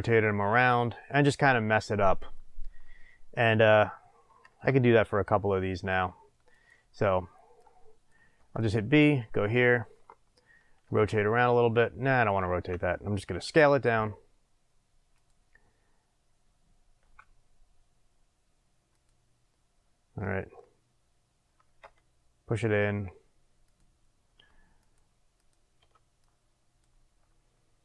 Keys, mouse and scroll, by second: 0.5 click, 0.7-6.5 middle drag, 4.6 b, 6.5 click, 7.6 click, 8.3 b, 10.8 r, 12.2 click, 12.4 ctrl+z, 13.3 s, 15.2 click, 17.0 s, 19.0 click, 21.8 g, 23.7 click, 24.8 click, 25.3 click, 25.8 b.